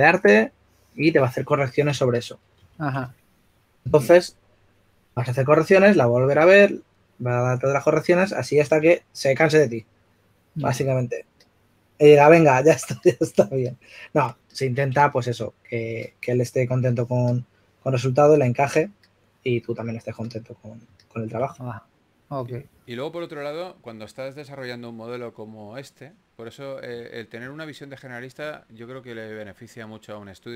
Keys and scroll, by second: 3.1-4.4 typing, 9.5 typing, 11.6 typing, 24.8-25.5 typing, 26.9 typing.